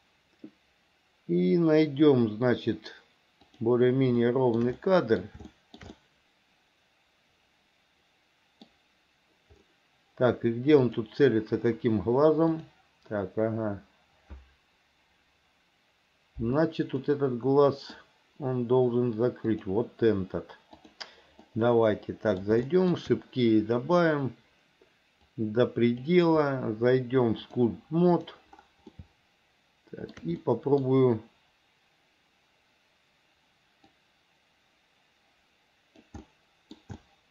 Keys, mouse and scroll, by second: 3.7 click, 4.5 shift+middle click, 5.0 middle click, 5.7 shift+middle click, 6.1-8.8 middle drag, 11.1 click, 12.8 click, 17.3 middle click, 19.8 click, 21.0 click, 21.7 middle click, 22.9 shift+middle click, 24.2 click, 25.6 click, 27.6-28.7 drag, 29.3-30.3 shift+middle drag, 30.6 middle click, 34.1-36.2 drag, 36.5 middle click, 37.2 shift+middle click.